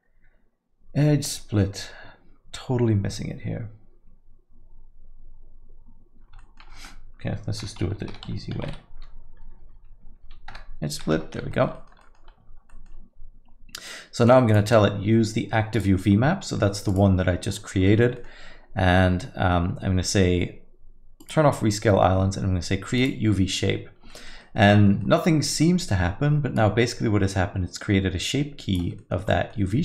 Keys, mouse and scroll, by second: 6.4 alt+middle click, 7.6 F3, 9.6 Down, 9.7 Down, 10.7 Down, 11.2 Tab, 11.5 alt+middle click, 11.7 middle click, 12.0 alt+middle click, 12.7 alt+middle click, 14.5 click, 15.7 click, 17.5 click, 17.5 middle click, 17.8 alt+middle click, 18.2 middle click, 21.2 click, 23.0 click, 24.1 middle click, 24.4 alt+middle click, 24.7 middle click, 25.0 alt+middle click, 26.5 click, 29.0 middle click, 29.3-29.8 scroll up 5, 29.5 alt+middle click.